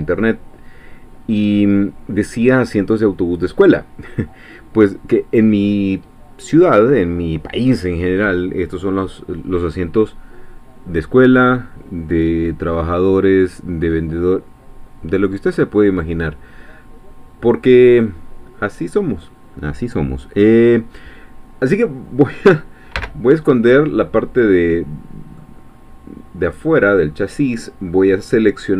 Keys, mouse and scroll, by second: 18.0 click, 23.0 h, 23.9-25.5 middle drag, 25.7 scroll up 2, 26.6-28.7 drag.